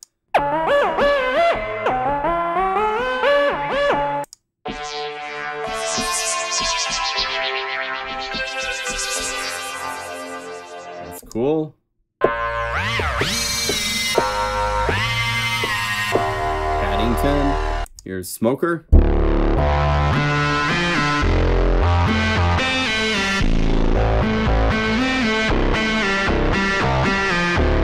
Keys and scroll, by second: 1.3 F4, 2.1 F3, 5.9 F4, 9.1 F2, 20.6 F4, 21.1 F2, 21.7 F3, 22.3 F3, 27.2 F4.